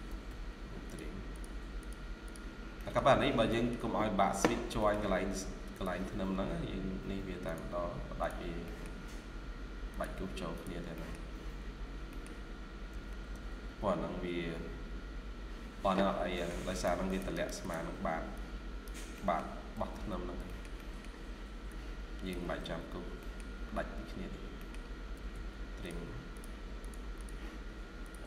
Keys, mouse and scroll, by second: 1.2 double click, 2.4 scroll down 1, 2.7 middle click, 4.2 scroll down 1, 4.4 scroll up 1, 4.7 middle click, 4.9 scroll down 1, 6.1-6.4 scroll up 1, 8.5 middle click, 10.8 middle click, 11.3 scroll down 1, 12.0 middle click, 12.8-14.2 typing, 13.5 scroll, 13.5-14.0 scroll up 2, 15.9 scroll down 1, 16.2 middle click, 16.5 scroll up 1, 16.6 right click, 19.0 middle click, 19.3 scroll down 1, 19.6 typing, 20.1-20.6 scroll down 2, 20.3 middle click, 20.7 middle click, 22.3 typing, 23.1 middle click, 23.7 scroll up 1, 24.5 middle click, 25.0 typing, 26.7 double click.